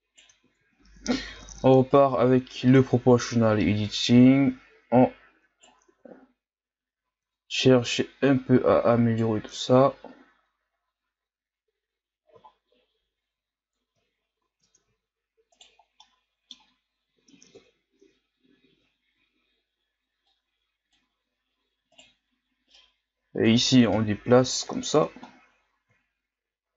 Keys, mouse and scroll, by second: 0.4 ctrl+z, 1.2 o, 1.9 right click, 5.9 Tab, 6.2-6.7 scroll down 2, 7.0-7.3 scroll up 1, 7.3 Tab, 7.9 right click, 9.5 Tab, 11.3-12.0 scroll down 2, 12.4-12.8 shift+scroll down 1, 12.8 scroll up 2, 14.1-14.6 shift+scroll up 5, 14.6 Tab, 15.5 right click, 15.8 scroll down 1, 16.0-17.5 middle drag, 17.5 KP_3, 18.9 ctrl+scroll down 1, 19.2-20.4 scroll up 3, 20.4-22.0 drag, 22.0 right click, 22.8-23.9 drag, 23.9 KP_1, 24.9 Tab, 25.3-26.4 scroll down 2, 26.4 shift+scroll up 4, 26.6-26.7 scroll down 2.